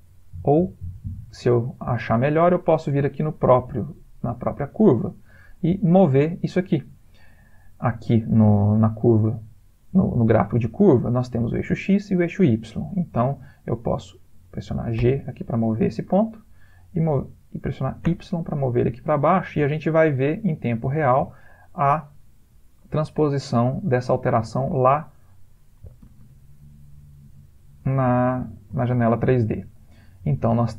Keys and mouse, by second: 0.0 click, 3.5 click, 15.0 g, 24.4 click, 26.0 g, 28.2 ctrl+middle click, 28.5 ctrl+middle click, 29.8 click.